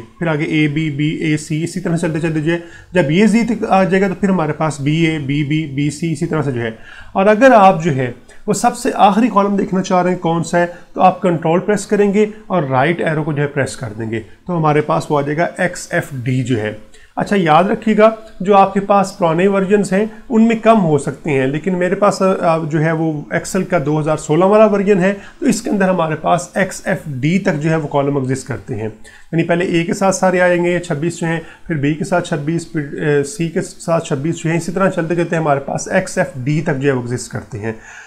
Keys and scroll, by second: 0.2 Right, 3.7 Left, 5.3 Right, 13.5 ctrl+Right.